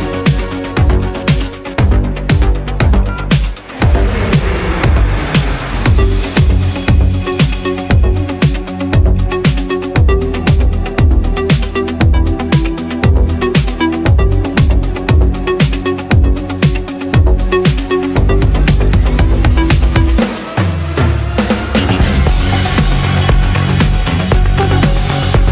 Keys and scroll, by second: 1.6 ctrl+z.